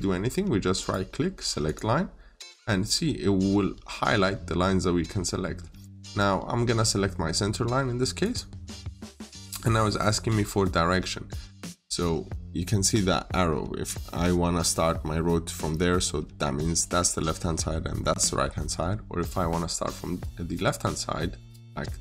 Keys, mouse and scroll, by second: 0.7 right click, 1.5 click, 6.4-6.7 scroll up 1, 8.1 click, 9.0 middle click, 21.9 scroll up 1.